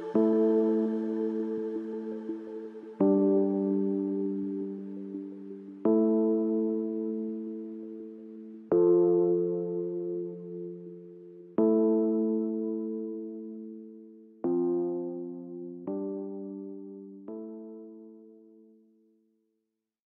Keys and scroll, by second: 10.9 Down, 17.8 Up, 19.2 Return.